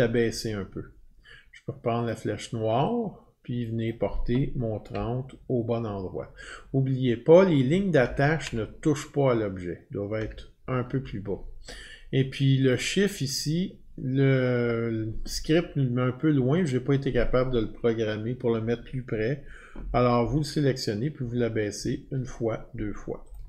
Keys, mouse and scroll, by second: 2.1 click, 3.9 click, 5.0-7.1 scroll down 50, 7.1-7.5 Down, 7.6-8.7 scroll down 15, 10.2 Down, 11.0 Down, 12.7 click, 12.7-13.4 scroll down 11, 13.4 click, 16.7 click, 21.2 Down, 21.8 Down, 23.3 click.